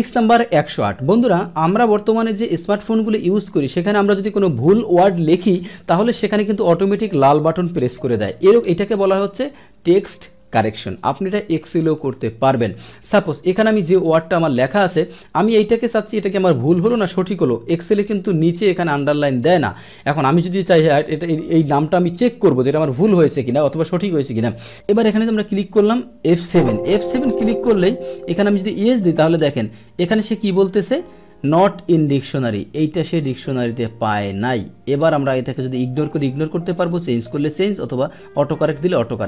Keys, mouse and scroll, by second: 1.8 click, 10.8 click, 13.2 click, 17.9 click, 24.8 click, 26.3 F7, 27.8 click, 28.7 click, 30.9 click, 38.7 click.